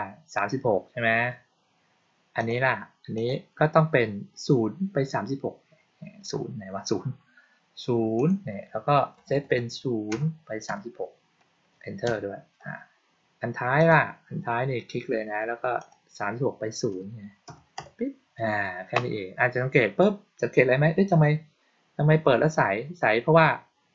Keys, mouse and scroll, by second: 2.3 click, 3.1 click, 8.1 click, 13.7 click, 15.7 click.